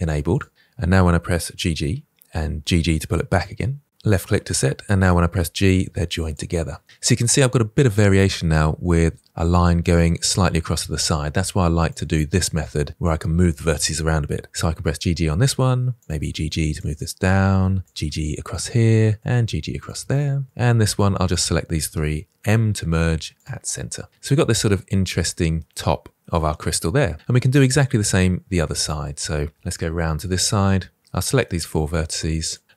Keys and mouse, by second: 1.4 g, 1.6-3.1 g, 2.6 click, 4.9 g, 6.8 middle click, 7.7 middle click, 11.8-14.7 drag, 14.7 g, 14.8 g, 16.1 g, 16.2 g, 16.6 click, 16.9 middle click, 17.9 g, 18.1 g, 18.4 click, 19.4 g, 19.5 g, 19.8 click, 20.1 middle click, 21.2 click, 22.6 m, 23.7 middle click, 24.5 middle click, 25.0-26.6 middle drag, 27.6-28.8 middle drag, 30.0 shift+middle click, 31.4 middle click, 32.3 shift+click.